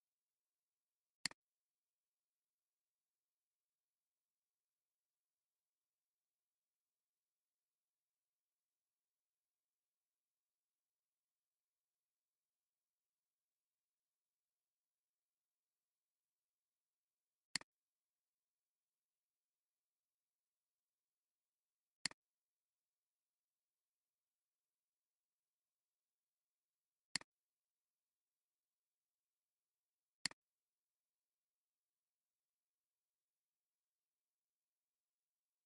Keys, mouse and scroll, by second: 3.6 scroll down 1, 11.1 scroll down 1, 23.9 scroll up 1, 24.1 scroll down 1.